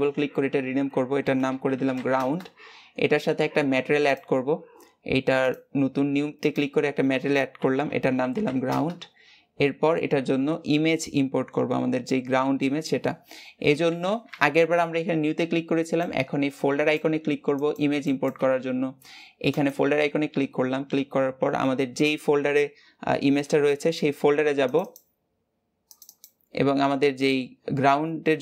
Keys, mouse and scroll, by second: 5.4-28.4 drag.